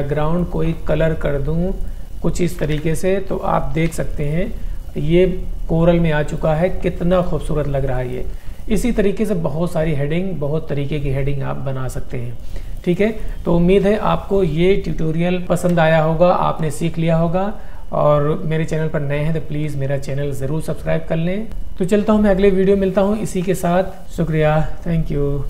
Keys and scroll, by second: 2.8 shift+Page_Up, 3.9 h, 8.4 space, 13.1 space.